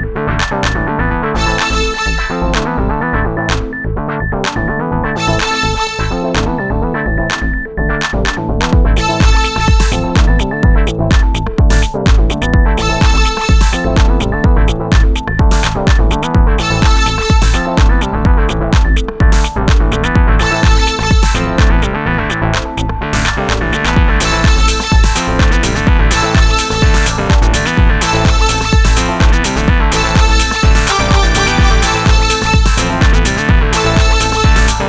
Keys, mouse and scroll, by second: 4.5 s, 8.3 ctrl+a, 11.9 s, 15.3-16.9 right drag, 15.5 s, 18.9 middle click, 19.3 middle click, 20.7 s, 26.3 s, 29.5 s.